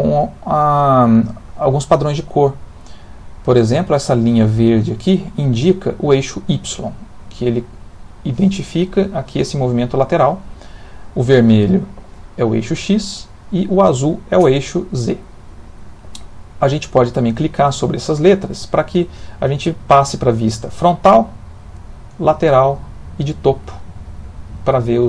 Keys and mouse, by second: 6.8 click, 11.3 click, 14.7 click, 16.3 click, 17.2 click, 18.5 click, 21.8 click, 22.8 click.